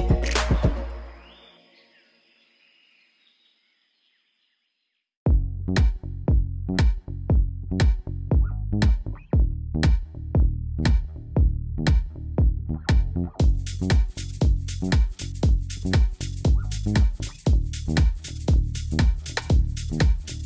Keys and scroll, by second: 0.3 Return, 5.5 ctrl+shift+t, 16.7 u.